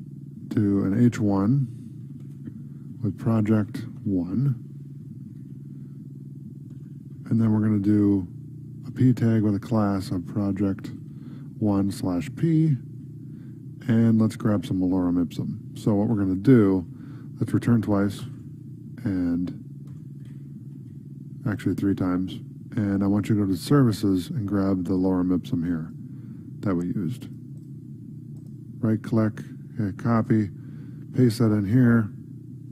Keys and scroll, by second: 4.0 space, 5.3 ctrl+Right, 9.2 space, 13.0 ctrl+Right, 16.1 ctrl+s, 16.6 ctrl+Left, 20.3 Up, 21.0 Tab, 21.5 ctrl+s, 31.2 ctrl+v, 31.7 ctrl+s.